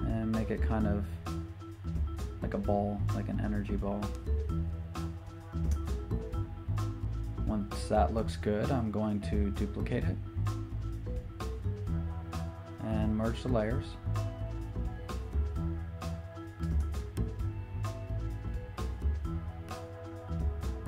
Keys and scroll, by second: 13.3 super+j.